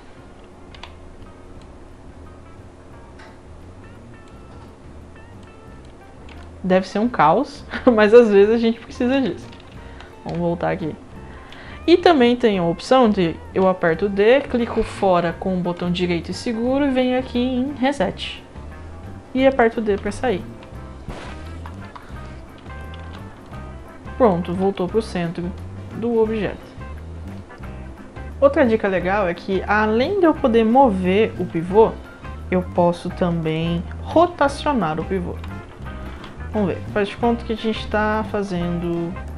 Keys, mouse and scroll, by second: 0.7 d, 1.6-4.3 drag, 5.4-5.8 drag, 6.1 scroll down 1, 6.4-9.1 alt+drag, 9.6 ctrl+z, 9.9 ctrl+z, 13.5 d, 15.7-17.9 right drag, 19.8 d, 23.1 w, 23.4 click, 23.7 scroll up 1, 24.2 click, 24.5 scroll up 1, 24.7-27.8 alt+drag, 31.4 d, 33.5 click, 34.1 d, 36.1 d, 36.6-37.6 right drag, 37.6 click.